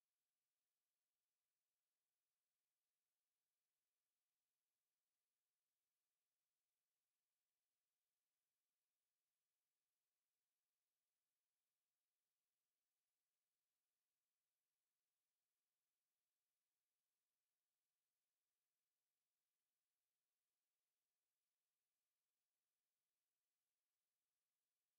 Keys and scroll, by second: 17.4 Escape.